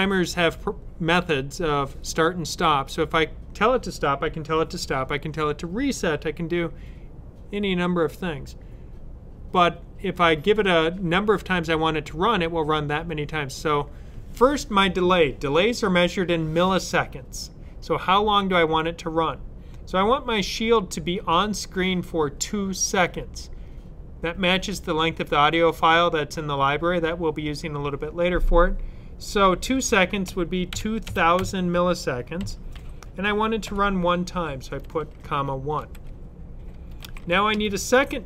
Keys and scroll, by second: 29.9-31.3 typing, 32.4 typing, 33.5 typing, 34.6 typing, 35.7-37.6 typing.